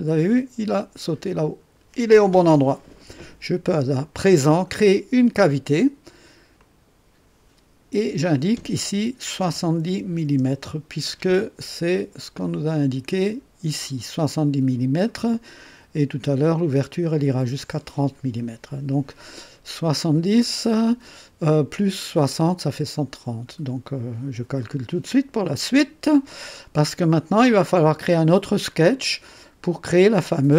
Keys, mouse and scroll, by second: 0.2-1.2 drag, 6.5 click, 9.3 KP_7, 9.8 KP_0, 10.2 KP_Enter, 12.4 click, 25.4 click, 26.5-27.9 drag, 29.3 click.